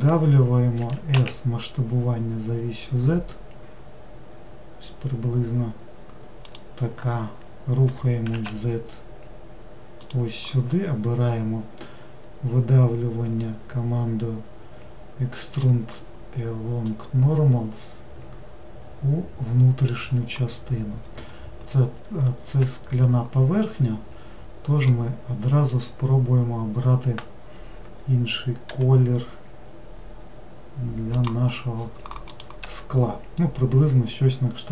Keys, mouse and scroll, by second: 0.8 s, 7.8 g, 15.5-17.0 drag, 22.6 w, 24.9-28.0 middle drag, 28.7 g.